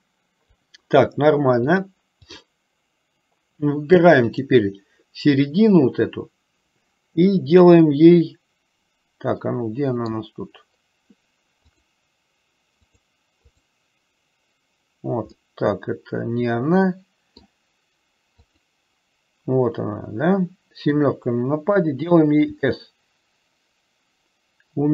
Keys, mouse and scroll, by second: 2.0 click, 9.6 middle click, 13.1 click, 13.6 click, 15.6-17.3 middle drag, 17.5 middle click, 18.6 click, 20.9 KP_7, 22.6 s.